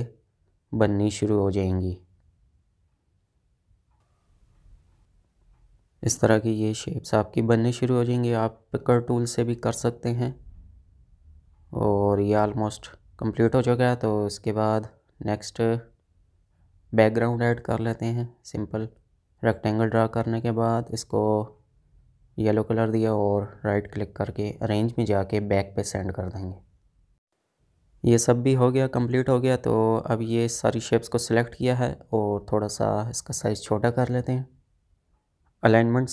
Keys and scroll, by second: 10.7 space, 27.6 space.